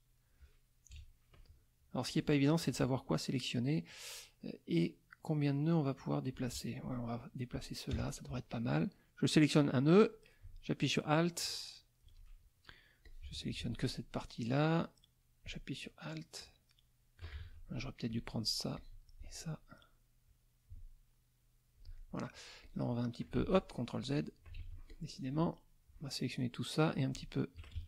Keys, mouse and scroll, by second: 0.1 middle click, 0.9 KP_Subtract, 2.0-6.5 drag, 7.9 KP_Add, 9.5-12.2 drag, 13.0 alt+click, 14.7-17.4 drag, 17.4 ctrl+alt+z, 18.1 shift+click, 18.7 shift+click, 20.2-21.9 drag, 21.9 alt+middle click, 22.6 alt+click, 23.4 ctrl+z, 23.9 ctrl+click, 24.7 ctrl+z, 24.9-26.1 ctrl+drag, 26.9 alt+click, 27.8 ctrl+alt+z.